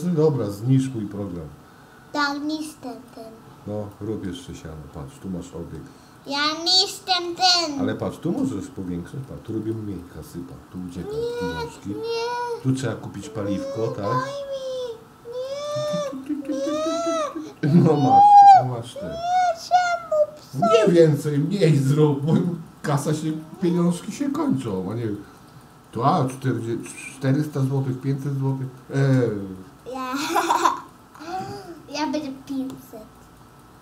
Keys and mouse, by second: 4.0 middle click, 4.5 click, 5.2 middle click, 6.7 middle click, 9.3 click, 9.5 click, 9.7 click, 10.3 click, 10.5 click, 10.8 click, 11.4 click, 11.7 click, 12.6 click, 15.5-18.1 drag, 21.1 click, 21.9 click, 22.2 click, 22.5 click, 22.9 click, 23.2 click, 24.0 click, 24.6 click, 24.8-25.9 drag, 26.0 click, 26.3 click, 27.0 click, 27.3 click, 27.5 click, 27.7 click, 28.0 click, 28.3 click, 28.5 click, 28.8 click, 29.0-30.2 drag, 30.3-31.5 drag, 31.7 click, 31.9 click, 32.1 click, 32.5 click, 32.8 click, 33.1 click, 33.6 click.